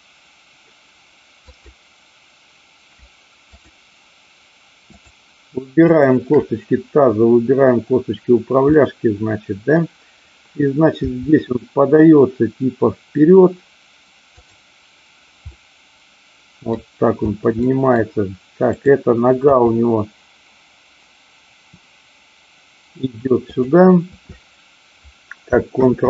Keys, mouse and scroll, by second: 1.5-2.5 drag, 3.5 shift+click, 4.9-5.9 shift+drag, 6.0 shift+click, 8.7-9.7 middle drag, 11.0 g, 14.3 click, 15.5-16.7 middle drag, 17.6 middle click, 18.7-19.7 drag, 19.7 g, 23.5 click, 25.9 ctrl+z.